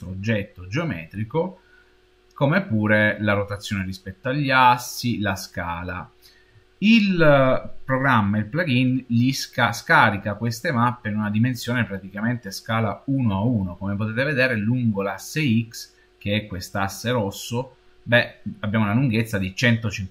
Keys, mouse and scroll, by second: 15.1-15.4 scroll down 3, 18.4 scroll up 2, 19.6-20.1 scroll up 3.